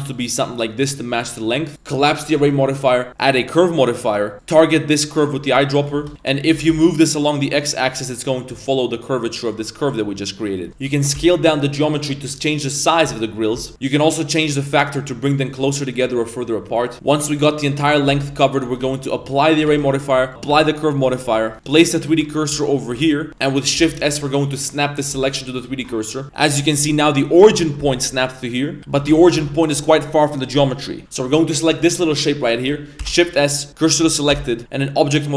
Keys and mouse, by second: 1.1 middle drag, 1.7 click, 2.3-3.3 drag, 4.3 click, 5.7 middle drag, 6.1 g, 6.1 middle click, 10.0-10.3 middle drag, 10.5 middle click, 10.7 shift+s, 12.2 Tab, 13.7 shift+middle click, 14.4 click, 15.5 click, 15.9 click, 16.8 click, 16.9 middle click, 16.9 z, 16.9 a, 16.9 b, 17.8 middle click, 18.1 shift+d, 18.7 a, 19.0 right click, 19.7 ctrl+a, 20.9 middle click, 21.1 shift+middle click, 21.3 z, 21.5 Tab, 21.5 1, 21.6 shift+right click, 22.0 right click, 22.4 right click, 22.7 shift+right click, 22.9 shift+s, 23.3 ctrl+z, 23.4 middle click, 23.8 shift+s, 26.0 middle drag, 26.5 g, 27.5 middle click, 28.4 middle drag, 28.8 Tab, 28.9 a, 29.4 Tab, 31.0 3, 31.0 shift+s, 31.6 alt+right click, 33.0 shift+s, 34.3 Tab, 35.0-35.3 drag.